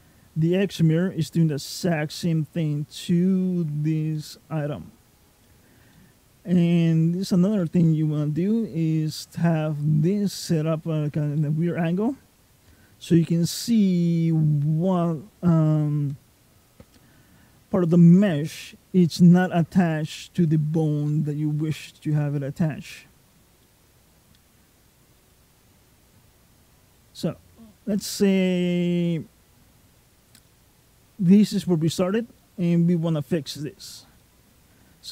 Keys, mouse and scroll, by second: 4.0 middle click, 5.1-5.4 scroll up 2, 5.8 middle click, 5.8-6.3 scroll up 1, 7.4 middle click, 11.2 middle click, 12.3-14.2 scroll down 1, 14.2-15.4 scroll down 1, 21.8 middle click, 23.1-23.5 scroll down 2, 23.5 middle click, 24.5-25.1 scroll up 3, 25.1 middle click, 26.8 middle click, 27.4-27.8 scroll down 1, 29.9-30.3 scroll down 2, 30.3 middle click, 32.2 middle click, 34.0 middle click.